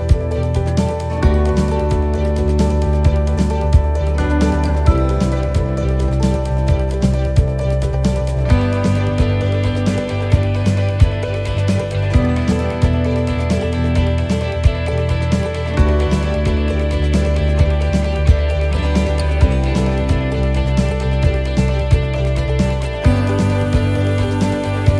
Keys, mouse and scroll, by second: 2.5 scroll down 2, 2.9 middle click, 3.5-3.8 scroll up 1, 3.8 middle click, 4.3 shift+middle click, 5.5 shift+d, 6.7 click, 9.1 middle click, 9.9 scroll up 1, 10.3 shift+middle click, 11.4 click, 14.4 middle click, 15.1 shift+middle click, 17.6 ctrl+r, 19.1 right click, 20.1 right click, 21.0 click, 22.6 click, 24.6 click.